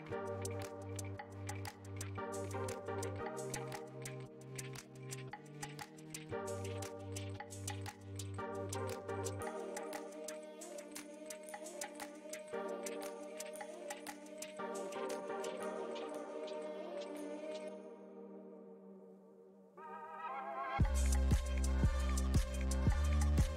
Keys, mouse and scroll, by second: 0.0-0.5 scroll down 1, 0.5-1.4 scroll up 4, 1.4-5.5 shift+middle drag, 5.5-5.9 scroll down 1, 5.9-10.7 shift+middle drag, 10.7-11.9 scroll up 1, 11.9 shift+middle click, 12.7 click, 13.9 Delete, 14.8-16.4 shift+middle drag, 16.4 scroll down 2, 16.9-19.1 middle drag, 19.1-19.8 scroll up 2, 19.8-23.1 shift+middle drag, 23.1 scroll up 1, 23.2-23.5 shift+middle drag.